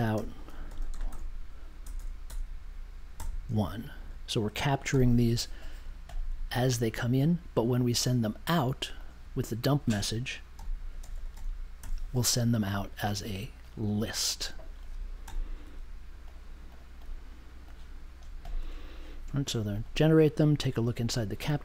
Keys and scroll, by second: 0.0-1.8 typing, 3.1 t, 3.8 space, 4.0 1, 4.9 super+j, 10.5 m, 11.3 m, 11.7 p, 15.2 m.